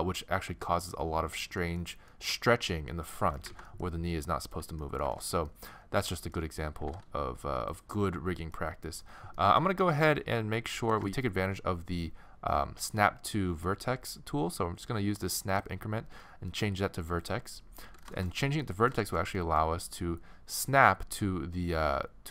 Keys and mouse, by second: 3.5 ctrl+z, 4.5-7.7 drag, 6.8 g, 15.5-16.6 drag, 17.8-18.9 middle drag, 19.8-22.3 middle drag.